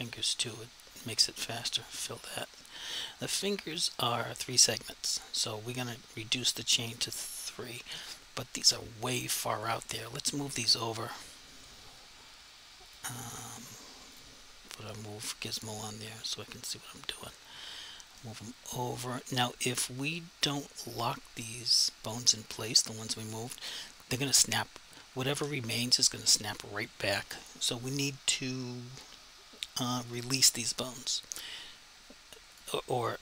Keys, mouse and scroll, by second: 6.9 click, 9.7 click, 12.9 click, 15.2 click, 21.5 click, 25.9 click, 30.1 click, 32.6 click.